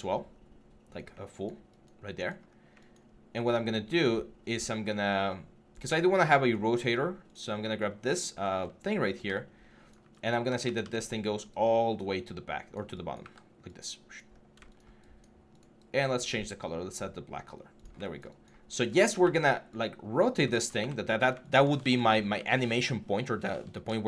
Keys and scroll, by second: 2.3-5.0 typing, 7.8 4, 9.0 w, 10.4 ctrl+z, 13.0 w, 14.1 6, 18.9 e, 20.3 ctrl+z, 20.6 q, 21.6 ctrl+z, 22.1 e, 23.3 ctrl+z.